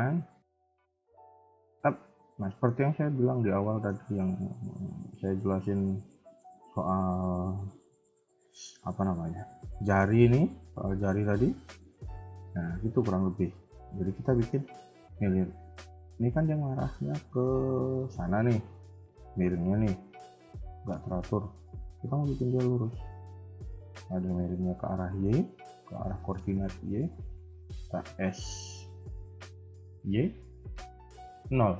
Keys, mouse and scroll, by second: 2.4 shift+middle click, 3.0-3.6 scroll down 5, 3.6 shift+middle click, 6.3 shift+middle click, 6.5-8.1 scroll up 7, 10.0 scroll down 1, 10.8 scroll down 4, 11.0 shift+middle click, 11.5-11.9 scroll up 2, 11.9 shift+middle click, 12.4 scroll up 2, 13.1 shift+middle click, 13.6-14.0 scroll down 2, 14.0-14.6 scroll up 1, 25.6 scroll down 2, 26.1 shift+middle click, 26.4-26.8 scroll up 2, 28.0-28.4 scroll up 1, 28.0 s.